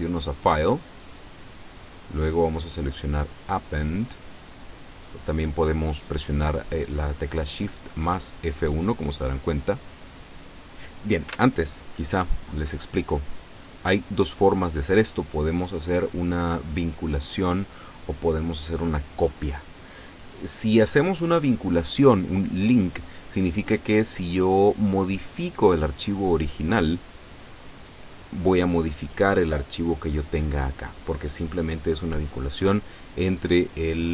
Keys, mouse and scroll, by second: 9.9 click, 11.4 Escape, 12.6 click.